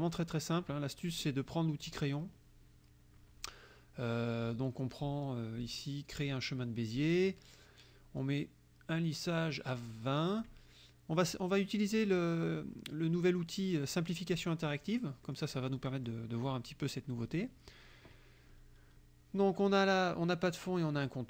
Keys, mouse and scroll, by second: 1.9 click, 8.2-10.6 drag, 15.3 click, 15.8 click.